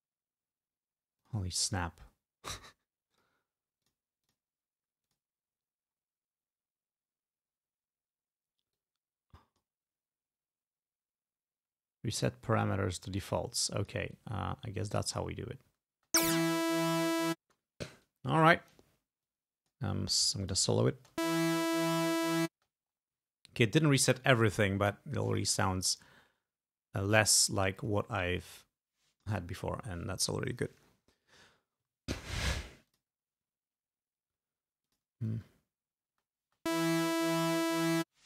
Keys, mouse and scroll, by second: 1.3 click, 3.2 click, 3.9 click, 4.4 click, 5.2 click, 8.9-9.9 drag, 12.3 click, 13.3 click, 14.2-15.5 drag, 16.0 space, 17.6 space, 18.1 click, 19.3 click, 19.8 click, 20.5 click, 21.1 space, 22.6 space, 25.3 click, 27.2 click, 27.9 click, 28.6 click, 33.0 click, 34.9 click, 35.4 space, 36.2 space.